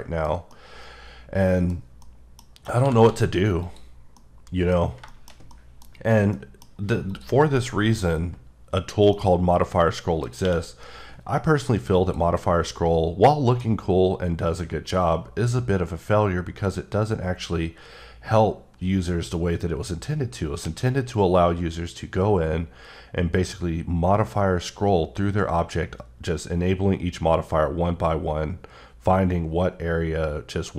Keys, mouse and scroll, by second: 0.2 scroll down 1, 0.5 middle click, 1.7 scroll up 2, 2.0 middle click, 2.3 scroll down 1, 2.8 g, 3.0 z, 3.6 click, 3.9 scroll down 2, 4.1 middle click, 4.7-5.1 scroll down 1, 5.1 middle click, 5.5 middle click, 6.3 middle click, 7.1 click, 9.1 middle click, 10.4 q, 11.9 click, 12.6 middle click, 13.7 scroll up 1, 14.3-15.1 scroll up 1, 15.1 scroll up 1, 16.4 scroll up 1, 16.9-18.0 scroll down 2, 18.1-18.7 scroll up 1, 18.7-19.3 scroll up 1, 20.5 scroll down 4, 21.0-22.4 scroll down 5, 22.4-23.0 scroll up 1, 23.0-24.0 scroll up 2, 24.0-24.6 scroll up 2, 24.9-25.8 scroll down 5, 25.8-27.3 scroll up 4, 27.4-28.6 scroll down 3, 28.6-30.0 scroll up 3, 30.2-30.7 scroll down 1.